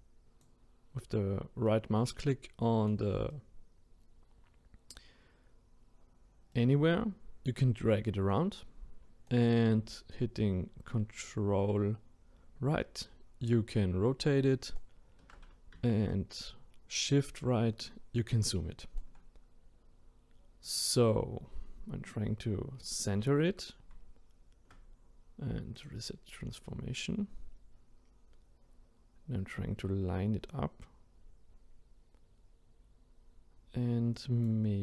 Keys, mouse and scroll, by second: 1.7-6.3 right drag, 6.5-9.7 right drag, 10.1-13.2 ctrl+right drag, 16.1-19.1 shift+right drag, 20.6 click, 21.8-23.0 scroll up 2, 25.8 click, 26.7-29.8 right drag.